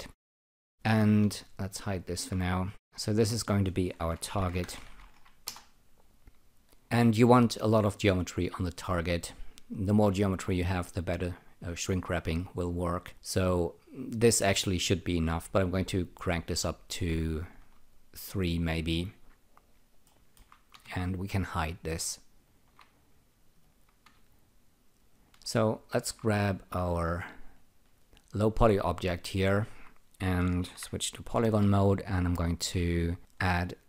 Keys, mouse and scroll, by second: 2.0 alt+shift+click, 3.0 double click, 4.0-5.5 typing, 6.8 click, 16.2 click, 17.9-19.8 alt+drag, 20.0 alt+middle click, 22.4 alt+shift+click, 24.9 alt+shift+click, 25.9 alt+shift+click, 27.4 alt+right click, 28.0 alt+click, 31.1-32.0 typing, 32.7 click.